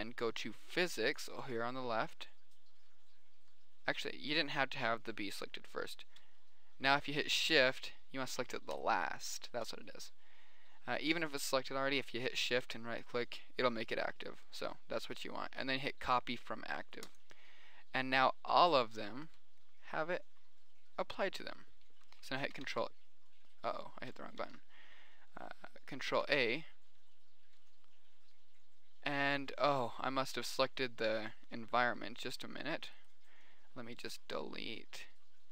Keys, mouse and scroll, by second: 0.2 click, 2.0-3.4 drag, 3.8-5.4 middle drag, 5.6-8.6 middle drag, 9.2 click, 9.8 middle click, 10.7 click, 11.0-13.4 middle drag, 17.5-19.2 drag, 23.1 alt+s, 24.9 ctrl+z, 26.5 alt+a, 26.6 middle click, 32.6 middle click, 32.7 Escape, 33.8-35.2 middle drag.